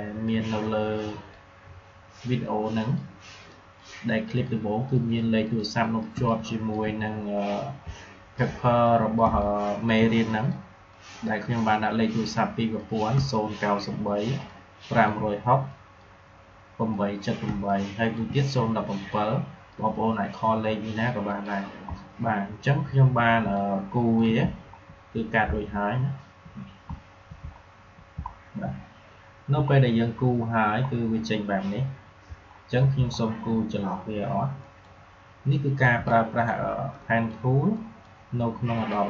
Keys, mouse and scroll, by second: 0.0 click, 0.9-2.7 drag, 6.0 space, 6.2 click, 6.5 space, 7.3-8.8 drag, 8.8 click, 9.2 space, 9.3 click, 9.6 space, 10.2 click, 13.0 space, 13.2 click, 13.5 space, 14.4 click, 17.4 space, 17.6 click, 17.8 space, 19.0-21.2 drag, 21.8 alt+scroll down 1, 23.4 click, 23.7 space, 24.5-25.6 alt+scroll up 2, 26.0 alt+scroll up 1, 27.0 alt+scroll down 1, 27.4 alt+scroll up 1, 28.2 alt+scroll down 1, 29.6 alt+scroll up 1, 30.8-31.2 alt+scroll down 3, 32.3 alt+scroll up 1, 33.0 alt+scroll up 1, 34.5 click, 35.9 space, 36.0 click, 36.3 space, 36.5 space, 36.8-39.0 drag.